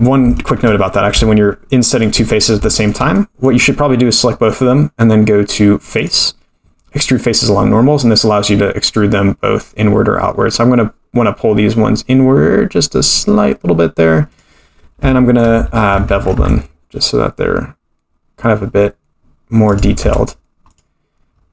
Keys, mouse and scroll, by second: 0.3 shift+middle click, 1.9 shift+click, 2.3-2.7 scroll down 2, 2.7 shift+middle click, 3.1 middle click, 6.0-14.3 drag, 15.1 shift+middle click, 16.3 ctrl+b, 20.0 Tab, 20.7 click, 21.3-21.5 scroll up 1.